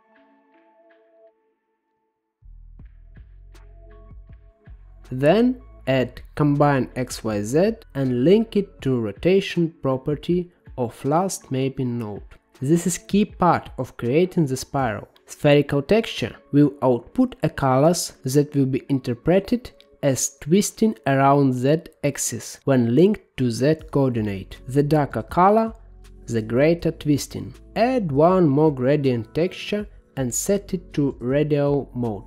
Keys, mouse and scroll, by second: 0.3 shift+a, 5.1-6.7 drag, 6.7-9.2 middle drag, 9.2 click, 9.9 g, 12.1 g, 13.6 click, 14.0 shift+a, 18.7 click, 21.8 click, 23.8-24.9 middle drag, 24.9 shift+a, 29.3-31.7 drag.